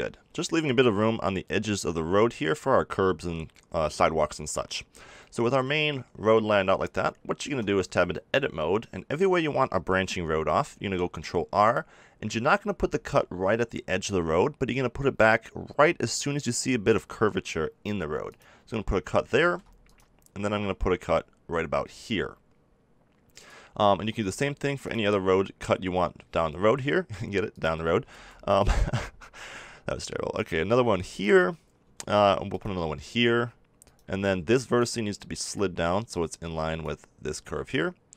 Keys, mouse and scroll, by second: 0.2 n, 4.6 middle click, 7.4 Tab, 10.6 ctrl+r, 18.3-22.6 drag, 19.4 ctrl+r, 23.4-25.3 drag, 24.0 ctrl+r, 27.6-29.5 drag, 28.0 ctrl+r, 31.9 ctrl+r, 33.9-36.3 drag, 36.4 click.